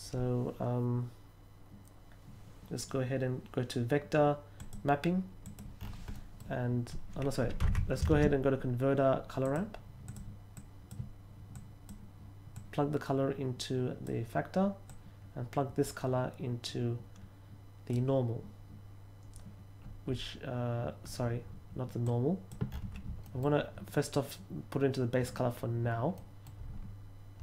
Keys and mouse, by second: 4.5 click, 5.4 click, 6.1 middle click, 7.6 x, 8.1 shift+a, 9.4 drag, 10.0 click, 10.5-10.9 drag, 11.5-11.8 drag, 12.5-14.0 drag, 14.8-17.8 drag, 22.0-22.4 drag, 23.2 middle click, 24.1-25.2 drag, 26.1 middle click.